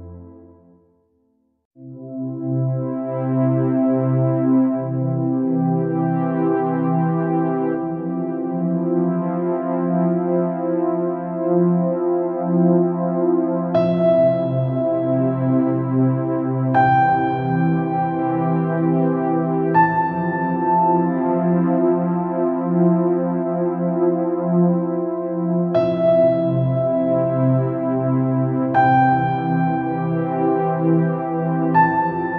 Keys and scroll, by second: 7.4 ctrl+z.